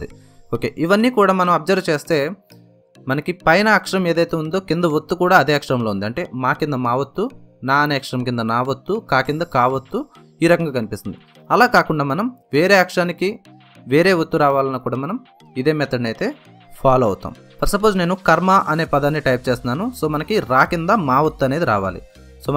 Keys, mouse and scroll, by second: 13.9 click, 16.4 ctrl+shift+n, 18.3 click, 21.4 j.